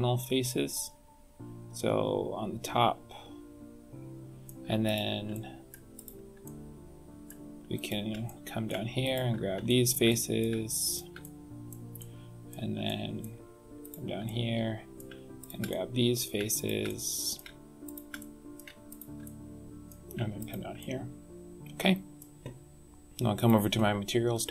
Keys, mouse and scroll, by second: 4.8 shift+click, 5.3 middle click, 5.9 shift+click, 6.4 middle click, 7.7 shift+click, 8.2 middle click, 9.0 shift+click, 9.6 shift+middle click, 10.0 middle click, 10.8 shift+click, 11.2 middle click, 11.9 middle click, 12.8 shift+middle click, 13.8 shift+click, 14.2 middle click, 15.3 shift+click, 15.6 middle click, 16.5 shift+click, 16.8 middle click, 17.8 shift+click, 18.1 middle click, 18.8 shift+click, 19.2 middle click, 20.3 shift+click, 20.7 middle click, 23.3 click.